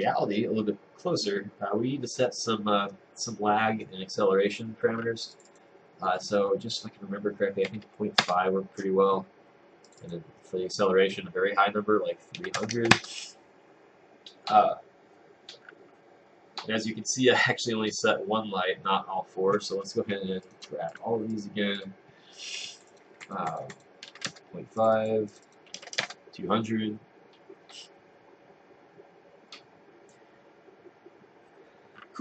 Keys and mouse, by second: 8.3 Return, 13.0 Return, 24.3 Return, 26.1 Return.